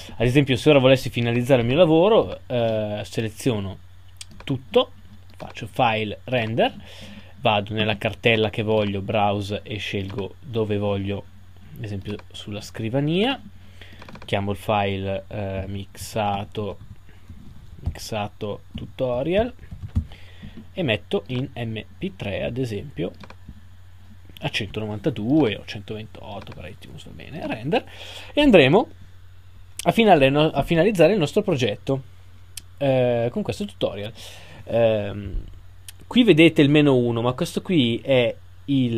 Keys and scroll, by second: 18.8 shift+-.